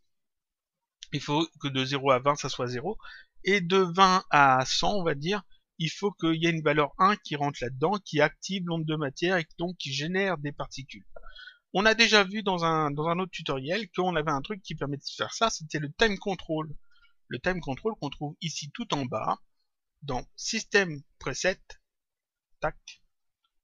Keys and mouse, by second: 18.8 click, 22.4 click.